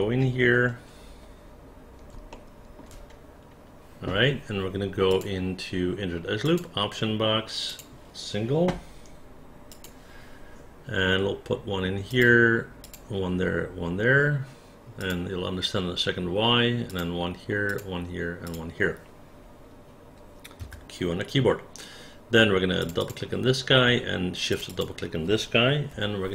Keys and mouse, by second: 2.3 alt+middle click, 7.7 click, 12.1 click, 12.8 click, 15.0 click, 16.9 click, 17.7 click, 18.4 click, 20.6 q, 22.8 click, 23.0 click, 24.5 shift+click, 24.7 shift+click, 25.9 r.